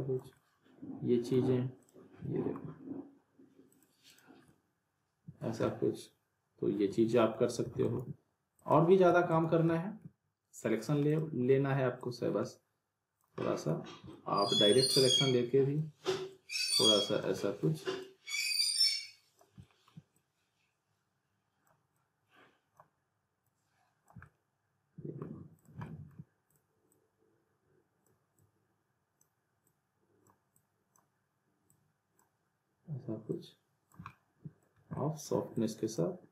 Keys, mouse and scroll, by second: 0.3-1.6 alt+middle drag, 1.8 click, 2.2 alt+middle click, 3.7 click, 4.5-5.4 middle click, 5.4 scroll down 1, 5.6-7.5 alt+middle drag, 7.7 alt+w, 7.8 alt+right click, 7.9 alt+w, 8.5 click, 9.1 w, 9.7 alt+middle click, 11.1-13.2 drag, 13.4 alt+middle click, 13.8 alt+scroll up 1, 14.4-14.7 alt+middle click, 14.7-16.0 drag, 17.4 alt+middle click, 18.0-19.6 drag, 24.2-25.5 middle drag, 25.6 click, 25.8 alt+middle click, 26.5-28.2 drag, 30.0-30.3 drag, 34.1-34.7 middle click, 34.8 scroll down 1, 34.9 alt+middle click, 35.5-36.2 drag.